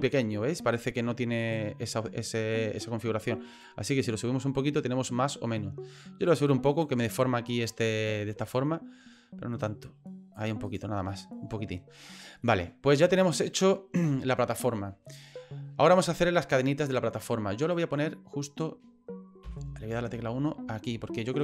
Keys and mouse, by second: 1.4 right click, 3.6-6.8 drag, 7.7 middle click, 8.4 right click, 9.6 click, 10.7 right click, 11.1 middle click, 12.5 middle click, 16.3 middle click, 17.6 right click, 19.4 KP_1, 20.9-21.4 drag.